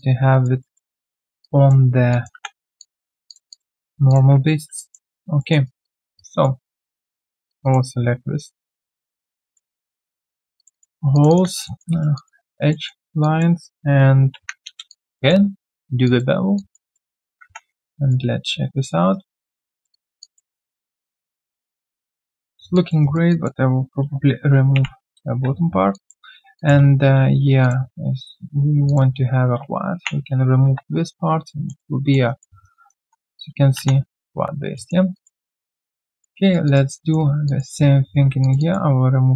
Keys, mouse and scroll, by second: 0.6 alt+middle click, 0.9 right click, 1.4 alt+click, 2.1 alt+click, 2.8 alt+click, 3.5 alt+click, 3.7 alt+middle click, 4.7 alt+click, 5.0 alt+right click, 5.4 alt+middle click, 5.6 alt+right click, 5.8 alt+click, 6.1 right click, 6.8 double click, 7.5 shift+click, 7.6 shift+double click, 7.9-8.9 alt+scroll down 1, 9.2 alt+click, 9.5 alt+middle click, 10.5 shift+click, 10.7 shift+double click, 11.1 shift+click, 11.6 alt+middle click, 11.9 alt+right click, 12.1 alt+click, 12.7 alt+middle click, 13.2 alt+click, 14.9 alt+click, 15.1 alt+middle click, 16.5 alt+click, 16.9 alt+middle click, 17.4 3, 17.8 right click, 18.7 alt+right click, 19.1 alt+right click, 19.9 alt+right click, 20.2 alt+click, 20.6 alt+middle click, 20.9-21.2 alt+scroll down 1, 21.2 alt+click, 22.7 alt+click, 23.0 alt+right click, 23.3 alt+click, 24.7 ctrl+Delete, 25.9 alt+click, 27.6 shift+click, 29.9 ctrl+Delete, 31.0-31.4 alt+scroll down 1, 31.4 alt+middle click, 32.2 alt+right click, 32.6 alt+right click, 33.0 1, 34.2 scroll down 1, 34.7 alt+middle click, 35.1 alt+click, 35.4 alt+right click, 35.6 alt+middle click, 35.8 alt+right click, 36.1 alt+click, 36.4 alt+right click, 36.6 alt+click, 36.9 alt+middle click, 37.4 alt+click, 37.8 alt+right click, 38.2 q, 38.6 double click.